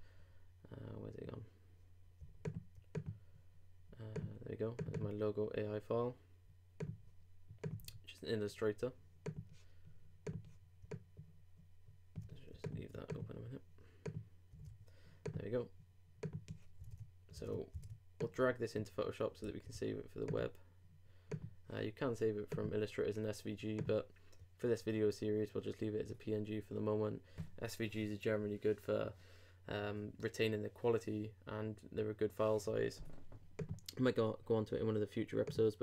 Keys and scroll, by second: 7.8 super+w, 14.6 super+w, 16.9 super+Tab, 19.5 super+c.